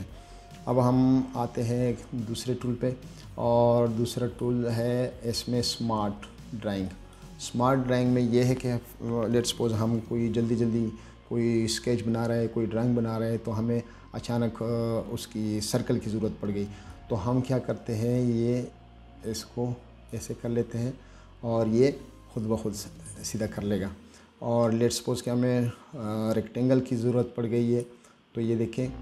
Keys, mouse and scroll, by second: 2.1-2.5 scroll down 2, 2.5 middle click, 2.8-3.1 scroll up 2, 4.4 click, 7.2 click, 17.2-20.4 drag, 25.5-28.1 drag.